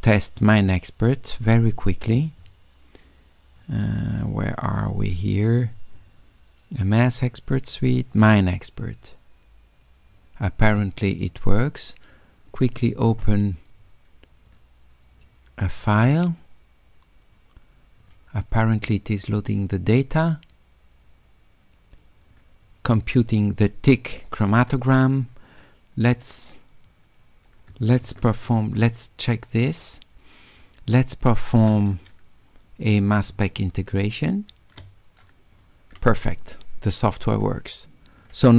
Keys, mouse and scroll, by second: 1.6-5.8 middle drag, 6.8 click, 8.2 click, 11.4 click, 12.5 click, 14.5 click, 15.7 click, 15.9 click, 18.0 click, 22.3 click, 24.3 middle click, 25.2 click, 25.6 middle click, 25.6-26.0 scroll down 1, 28.3 q, 29.7 click, 30.6 middle click, 30.6 scroll up 1, 30.8-31.4 scroll down 1, 31.4 scroll, 32.8 click, 33.3 s, 33.6 right click, 35.5 click, 37.3 click, 38.2 click.